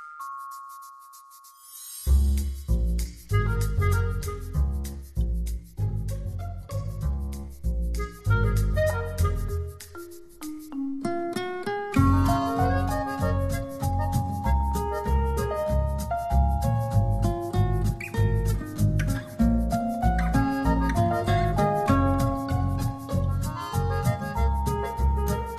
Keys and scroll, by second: 0.3 h.